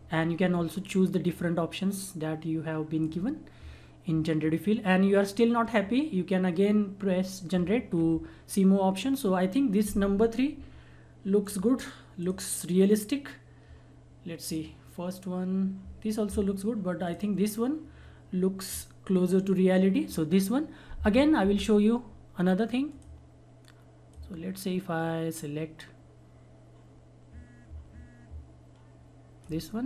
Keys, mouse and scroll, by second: 11.4 click, 17.0 click, 22.8-29.8 drag.